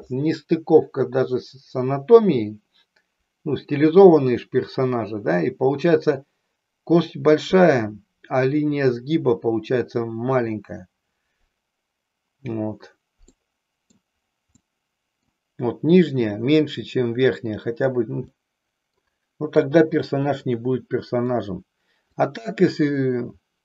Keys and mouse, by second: 13.4 middle click, 14.6 middle click, 18.3 middle click, 19.5 KP_3, 20.6 middle click, 22.1-23.2 drag.